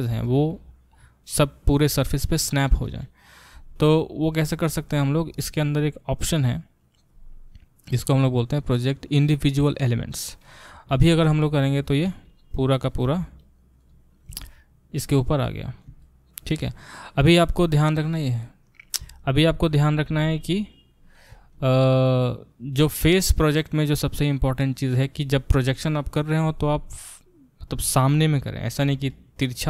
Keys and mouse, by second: 8.7-12.8 drag, 12.8-18.1 middle drag, 13.0 g, 18.1-20.8 drag, 20.1 g, 20.8-29.6 middle drag.